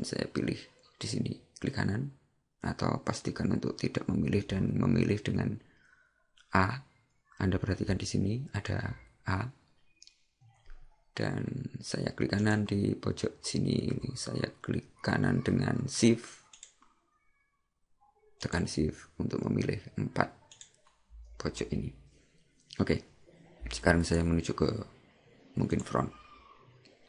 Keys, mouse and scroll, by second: 12.5 right click, 16.6 shift+right click, 24.1 click, 25.8 click.